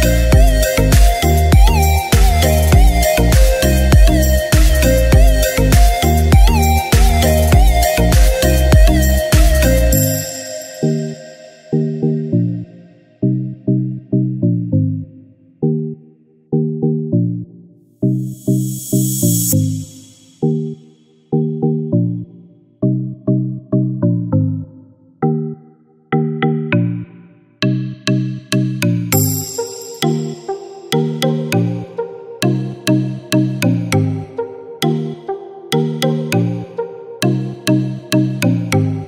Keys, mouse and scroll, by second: 0.1-9.0 drag, 0.1 typing, 8.5-9.0 typing, 9.2 click, 9.7 scroll down 1, 10.2 scroll up 1, 11.2 click, 11.2 typing, 14.0-15.0 typing, 15.0 click, 15.0-18.7 drag, 18.7-21.9 drag, 21.9 space, 22.2 scroll down 1, 23.2 click, 23.5 scroll down 1, 24.4 scroll up 1, 24.9 click, 25.9 typing, 26.1 ctrl+d, 27.3-33.2 drag, 33.2 scroll up 1, 35.0 click, 35.6 typing, 36.1 scroll down 1, 36.6 scroll down 1, 37.9-39.0 drag.